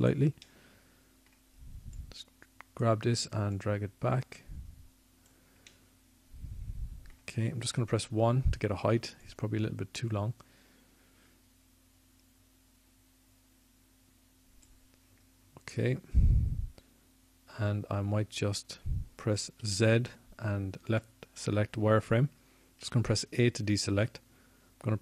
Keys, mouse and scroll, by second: 1.1 r, 5.5 click, 5.6-7.2 middle drag, 10.8 middle click, 11.2 middle click, 11.7 middle click, 12.7 KP_1, 24.8 z.